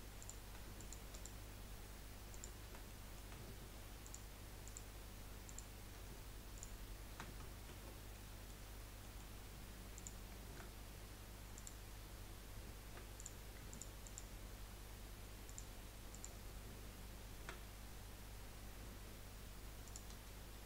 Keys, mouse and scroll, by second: 0.2 click, 0.8 alt+shift+click, 1.1 alt+shift+click, 2.3 alt+shift+click, 2.9-4.0 middle drag, 4.0 alt+shift+click, 4.6 alt+shift+click, 5.4 alt+shift+click, 6.5-7.6 alt+shift+drag, 7.7 ctrl+z, 8.1 middle click, 8.6-9.2 scroll up 3, 9.2 middle click, 9.9 click, 11.7 click, 13.2 click, 13.7 alt+shift+click, 14.0 alt+shift+click, 15.4 alt+shift+click, 16.1 alt+shift+click, 18.0-19.0 scroll down 2, 19.8 alt+shift+click.